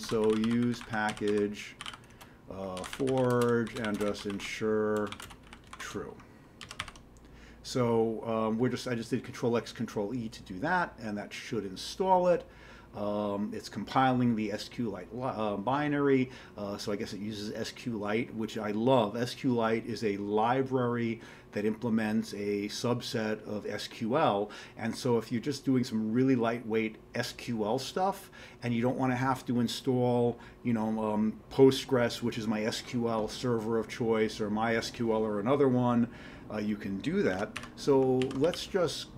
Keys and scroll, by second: 0.0-7.3 typing, 37.4 ctrl+x, 37.5 1, 38.2 ctrl+x, 38.4 g.